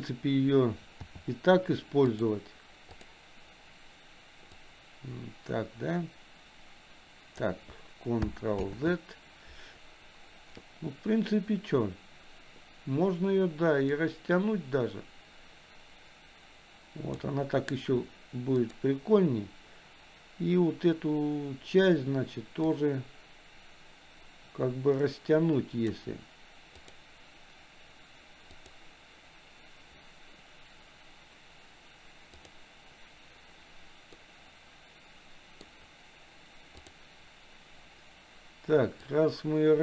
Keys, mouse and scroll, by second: 1.1 t, 2.1 click, 3.0 click, 5.0-8.1 drag, 8.9 ctrl+z, 14.3-17.7 drag, 18.8 click, 22.7-26.9 drag, 28.8 click, 32.5 click, 34.6-36.1 middle drag, 37.0 click, 39.2-39.8 drag.